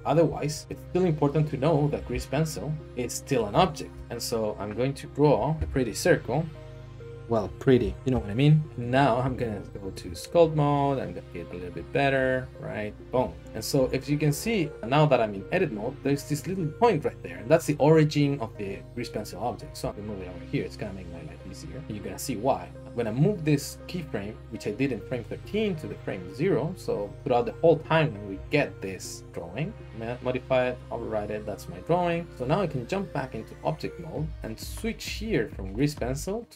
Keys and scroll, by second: 0.2 Tab, 2.1 a, 3.9-5.5 typing, 4.0 Return, 5.6 alt+shift+z, 8.0 ctrl+z, 9.2-10.0 Tab, 11.3 Tab, 13.0 Tab, 13.1 Tab, 13.8 a, 19.6 g, 28.3 s, 29.2 g, 29.2 z, 32.9 Tab, 33.7 Tab.